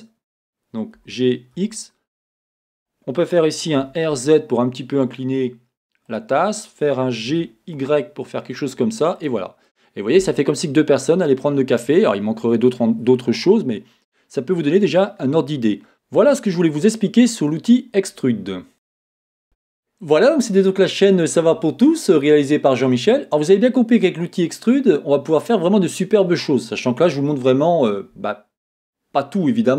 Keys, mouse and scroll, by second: 1.0 g, 2.9 click, 3.8 r, 6.2-7.3 drag, 7.3 g, 9.3 click, 9.7-29.7 middle drag.